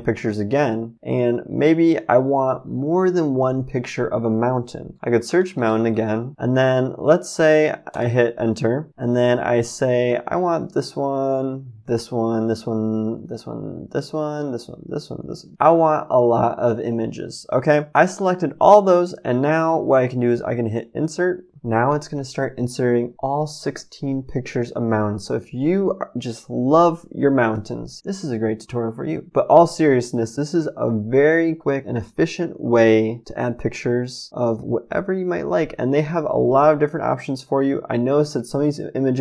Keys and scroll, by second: 4.7-6.3 typing, 7.9 Return.